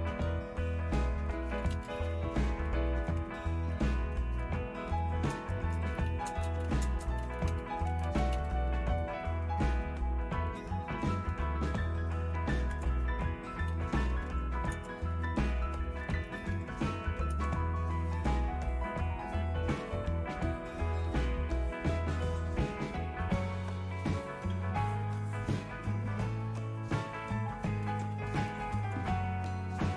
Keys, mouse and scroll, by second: 0.0 ctrl+x, 1.3-3.4 typing, 5.0-8.9 typing, 13.6-14.8 typing, 14.8 Return, 15.9-17.1 typing, 17.4 Return, 28.6 typing, 28.8 Return.